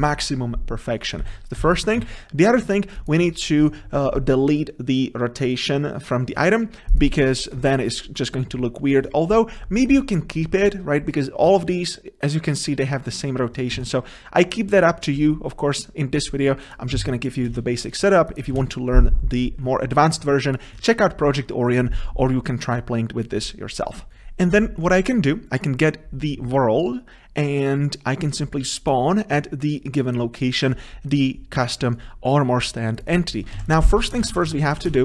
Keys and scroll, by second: 1.4 ctrl+z, 24.1 ctrl+v, 33.6 ctrl+c.